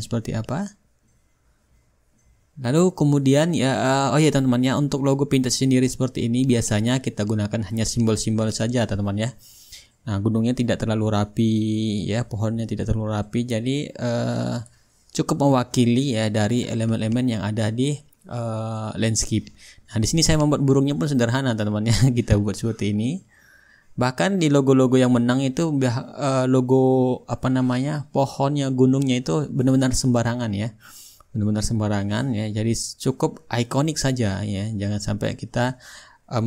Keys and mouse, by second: 1.2-2.8 drag, 4.0 click, 4.6 middle click, 4.8-6.8 drag, 8.2-9.3 drag, 9.8-10.9 drag, 11.6-12.8 drag, 13.3 ctrl+z, 14.1-21.8 drag, 22.8-24.0 drag, 24.5-27.0 drag, 25.2-27.0 shift+right drag, 26.1-28.2 middle drag, 28.2-30.7 drag, 31.1-36.4 drag.